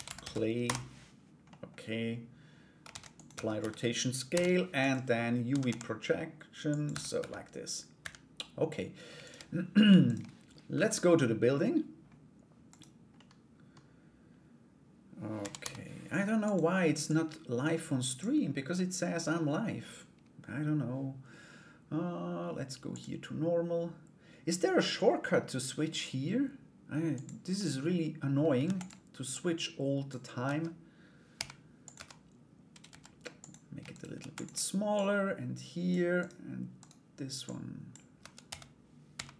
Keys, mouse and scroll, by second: 1.1 middle click, 2.4 ctrl+a, 2.9 Tab, 3.1 a, 3.9 u, 5.1 a, 5.1 s, 5.2 s, 5.2 d, 6.5 Tab, 6.7 /, 7.6 /, 8.8 shift+right click, 9.6 shift+right click, 10.3 /, 12.2 right click, 12.7 middle click, 16.6-17.8 drag, 18.3 middle click, 22.6-27.0 drag, 27.1 middle click, 28.2 shift+d, 28.9 click, 30.0 Tab, 30.9 g, 31.5 Tab, 32.4 s, 33.5 shift+right click, 33.7 shift+d, 34.5 click, 35.8 right click, 36.3 right click, 37.0 click, 37.8 Tab, 38.0 a, 38.7 g.